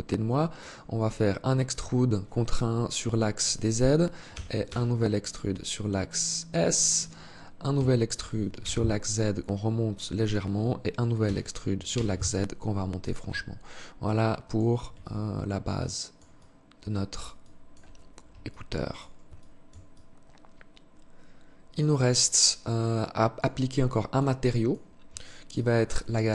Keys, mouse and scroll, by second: 3.5 e, 6.9 e, 10.3 e, 12.3 Tab, 13.1 click, 14.1 alt+click, 15.6 alt+click, 16.5 alt+click, 17.1-17.6 scroll down 1, 17.6 alt+click, 17.6 scroll down 3, 18.5 alt+shift+click, 19.1 alt+click, 23.0 alt+click, 23.6 alt+click, 24.7 alt+click, 25.9 alt+shift+click.